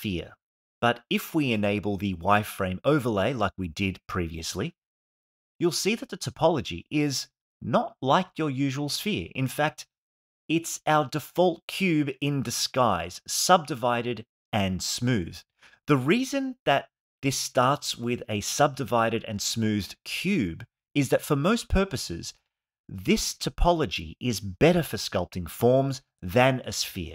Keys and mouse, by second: 3.4-8.0 middle drag, 8.6 ctrl+Tab, 9.5 shift+a, 10.2 g, 10.2 x, 10.7 Tab, 10.9 right click, 12.0 click, 13.2 click, 14.6-18.6 middle drag, 19.5 ctrl+Tab, 22.0 x.